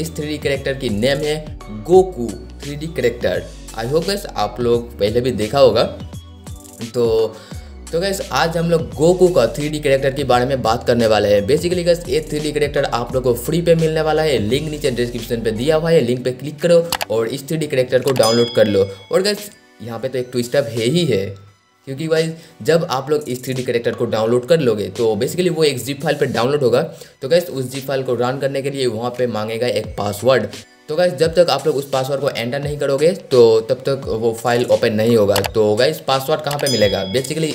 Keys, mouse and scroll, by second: 3.4 click.